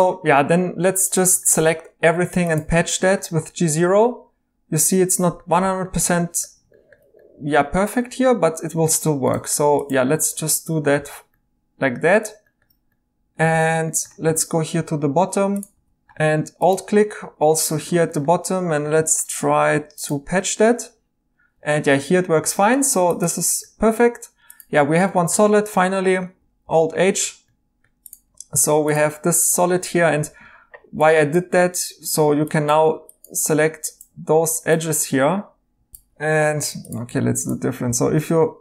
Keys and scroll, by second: 11.0 e, 13.5 e, 15.1-15.7 typing, 24.8 Tab, 26.6 alt+h, 30.7 2, 32.3 2, 35.9 Tab, 35.9 Escape, 36.5 Tab, 37.1 Tab, 37.8 typing.